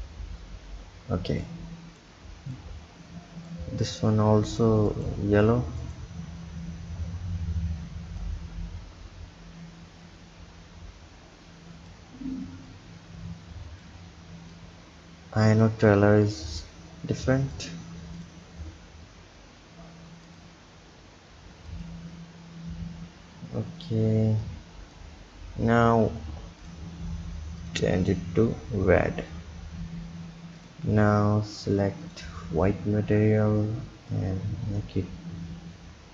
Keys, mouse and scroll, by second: 8.4-11.2 drag, 12.8-16.4 drag, 24.5 click, 25.3-26.8 scroll down 2, 26.8 click, 30.6 click, 32.1 click, 34.2-36.1 drag.